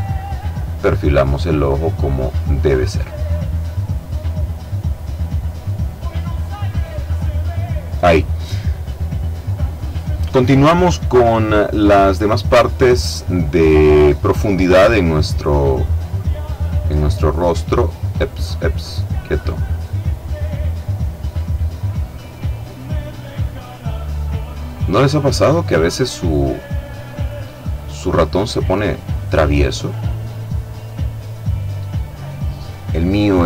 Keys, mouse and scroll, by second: 2.7-4.7 drag, 4.9-7.2 drag, 7.9-8.5 scroll down 2, 8.5-9.4 scroll up 1, 11.0 click, 11.7-13.3 middle drag, 13.3-14.4 scroll down 1, 14.4 click, 15.0 scroll down 1, 15.1 click, 15.7-16.2 scroll up 1, 16.3-16.9 scroll up 1, 16.9 scroll down 1, 17.0-17.5 scroll up 1, 17.5-18.1 scroll down 1, 20.1 click, 21.5 click, 22.5 click, 24.9 click, 27.6 click, 28.3 click, 29.2-30.4 middle drag, 30.4 click.